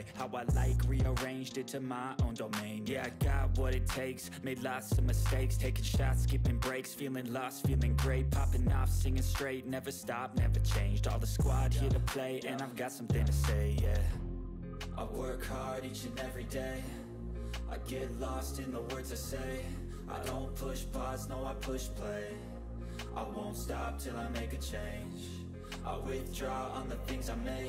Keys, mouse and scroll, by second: 0.1-1.8 typing, 1.8-2.6 click, 3.1 ctrl+scroll down 1, 3.2 ctrl+middle drag, 5.2 click, 6.2 click, 6.8 ctrl+d, 7.0-7.8 click, 8.0 ctrl+scroll up 1, 8.4 ctrl+scroll down 1, 8.6 ctrl+middle click, 9.0-10.3 drag, 10.7-12.6 typing, 12.8 click, 13.3 ctrl+scroll down 1, 13.4 ctrl+middle click, 13.8 ctrl+scroll down 1, 14.1 click, 14.7 Down, 15.1 Right, 15.2 Down, 16.1 click, 16.5 ctrl+d, 16.6-18.3 drag, 18.4-22.1 typing, 22.4-23.5 drag, 26.2-26.5 click.